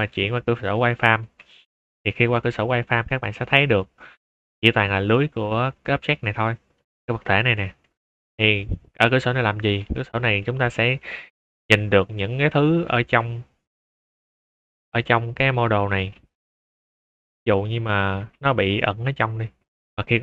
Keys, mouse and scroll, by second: 0.6 z, 1.0 click, 1.9-2.3 middle drag, 2.6 click, 3.0-3.3 middle drag, 3.5 shift+middle drag, 4.4 scroll up 2, 5.0 scroll down 4, 5.2-5.6 middle drag, 5.9 shift+middle drag, 6.2 scroll up 2, 6.7 click, 7.5 middle drag, 7.9 shift+middle drag, 8.6 middle click, 8.9 scroll down 1, 9.2 z, 10.1 scroll up 2, 10.2 middle click, 10.6 click, 10.9-11.2 middle drag, 11.4 shift+middle drag, 11.7 shift+scroll up 2, 12.0 click, 12.6 click, 12.8 shift+a, 13.8 shift+click, 14.3 middle drag, 14.7 click, 15.0 click, 15.4 click, 15.8 space, 15.9 s, 16.7-17.6 drag, 18.0 space, 18.1 g, 18.5-18.9 drag, 19.0 click, 19.2 z, 19.8 middle click, 20.1 middle drag.